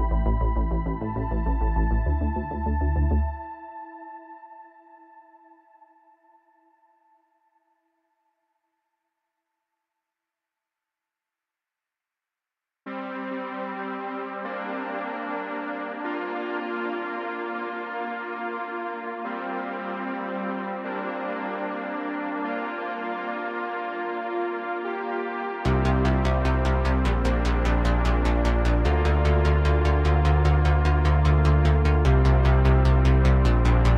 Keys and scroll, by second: 2.5 space, 14.0 space, 16.4 r, 18.1 r, 20.8 r, 21.2 z, 25.8 r, 26.1 z, 28.5 r, 30.4 z, 30.6 z.